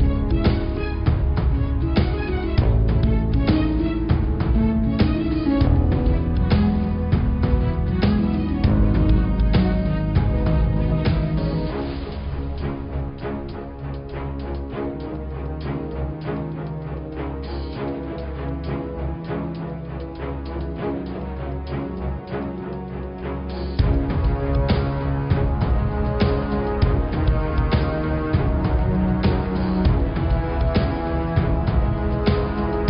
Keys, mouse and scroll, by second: 1.6 middle click, 2.3 shift+a, 4.8-6.3 middle drag, 6.3 g, 7.7-8.9 middle drag, 8.9 s, 12.0-13.4 middle drag, 13.4-14.0 scroll up 3, 14.0 s, 18.2 click, 18.8-19.9 scroll up 4, 19.9 s, 24.4 click, 25.1 s, 28.0 g, 30.5-32.2 middle drag, 32.2 s.